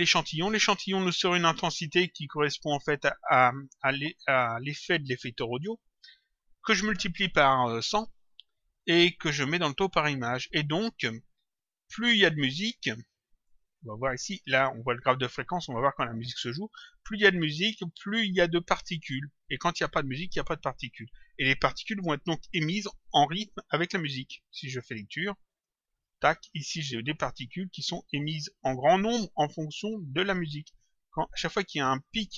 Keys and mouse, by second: 2.1 click, 3.4 click, 5.8 click, 10.6 click, 13.7 click, 25.5 click.